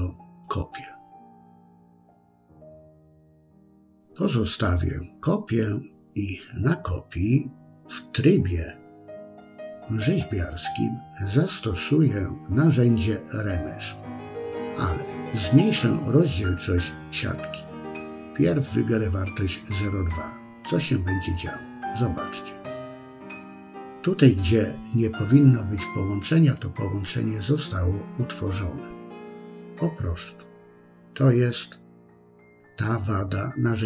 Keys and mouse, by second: 1.9 click, 2.9 click, 4.6 click, 5.7-6.7 middle drag, 7.4 KP_1, 9.4 Tab, 13.1-21.5 drag, 22.1-24.1 middle drag, 24.5-26.3 middle drag, 26.8-28.1 middle drag, 28.8-30.8 middle drag.